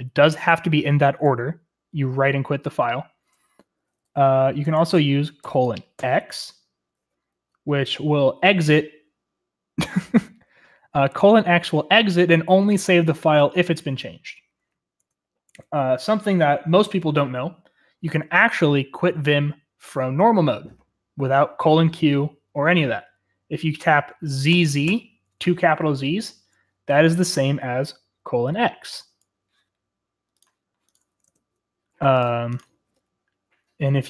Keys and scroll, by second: 4.6 Escape, 5.4-5.9 typing, 15.0 Escape, 15.4 Escape, 24.5 shift+z, 24.8 shift+z, 31.2 ctrl+space.